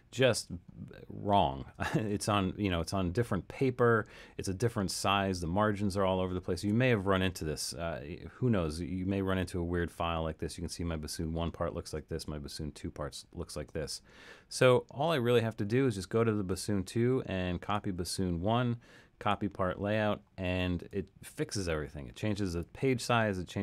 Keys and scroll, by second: 6.5 alt+super+,, 12.1 alt+super+., 13.8 alt+super+,, 15.2 alt+super+..